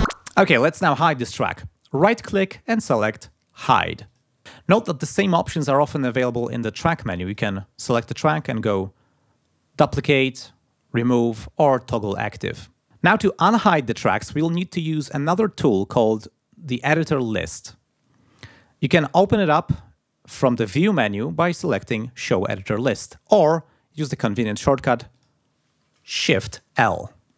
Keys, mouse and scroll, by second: 1.9 right click, 4.1 click, 7.3 click, 8.4 click, 20.7 click, 25.2 click, 26.8 shift+l.